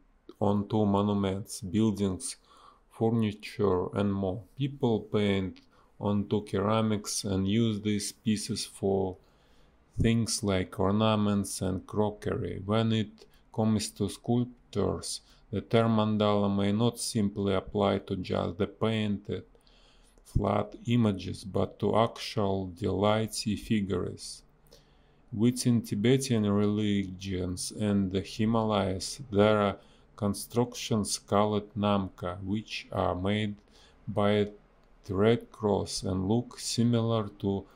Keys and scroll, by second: 1.4 space, 5.8 space, 7.7 space, 10.4 ctrl+z, 13.2 ctrl+z, 15.8 ctrl+z, 17.3 ctrl+z, 18.3 ctrl+z, 18.4 space, 20.5 ctrl+z, 22.8 ctrl+z, 25.1 ctrl+z, 27.7 ctrl+z, 31.4 ctrl+z, 31.8 space, 32.5 space, 36.9 a, 37.3 space.